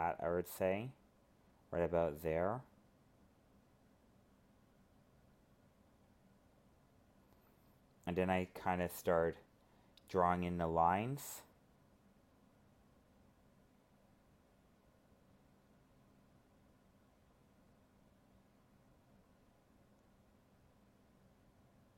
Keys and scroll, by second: 6.9 alt+space, 12.9 ctrl+z.